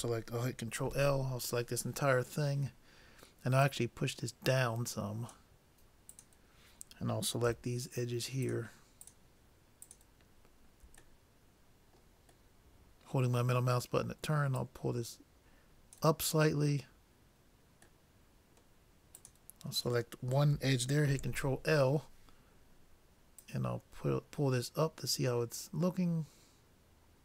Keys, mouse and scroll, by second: 0.9 ctrl+l, 3.6-5.5 drag, 6.2-7.8 drag, 8.4-11.7 drag, 11.1-12.7 middle drag, 14.6-16.3 drag, 18.1-20.0 middle drag, 19.3-21.1 drag, 21.1 ctrl+l, 23.5-25.3 drag.